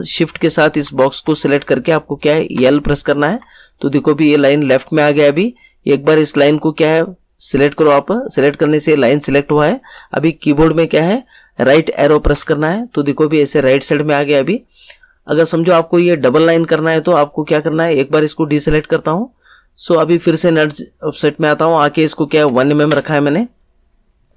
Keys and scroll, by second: 2.5 l, 12.3 Right, 22.3 1, 22.8 Return.